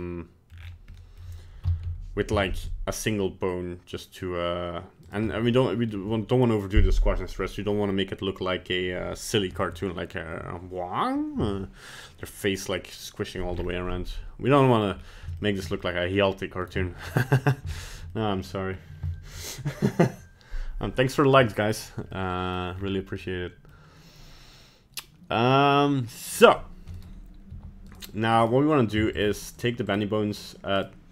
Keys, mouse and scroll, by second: 0.0 middle click, 0.5-1.0 scroll down 6, 1.0 middle click, 1.6 KP_1, 1.8 KP_3, 2.3 z, 5.3 middle click, 13.5-13.9 scroll up 5, 14.1 scroll down 1, 14.3 middle click, 14.8 middle click, 15.0 scroll down 1, 15.4 shift+middle click, 15.8 middle click, 16.2 scroll down 1, 16.3 middle click, 16.8 shift+middle click, 17.1 middle click, 17.7 shift+middle click, 18.0 shift+middle click, 18.1 middle click, 18.7 scroll up 1, 19.1 shift+middle click, 19.5 middle click, 22.1 middle click, 22.7-23.2 scroll up 2, 23.2 middle click, 26.4-27.0 scroll up 1, 27.0 right click, 27.0-27.5 scroll up 1, 27.5 g, 28.4 right click, 29.2 shift+right click, 29.6 right click, 29.9 shift+right click, 30.4 shift+right click, 30.8 shift+right click.